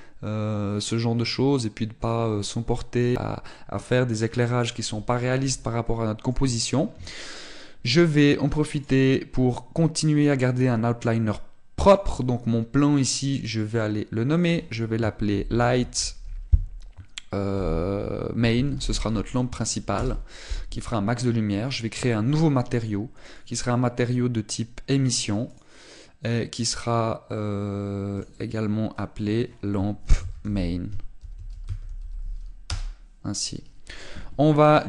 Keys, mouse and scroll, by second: 6.0 middle click, 9.7 click, 12.8 click, 24.2 click, 29.1 click.